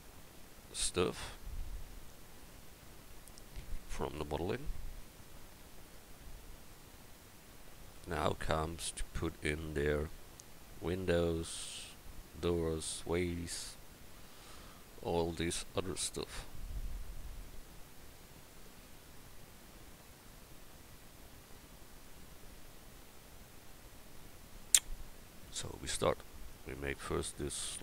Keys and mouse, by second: 2.6 KP_1.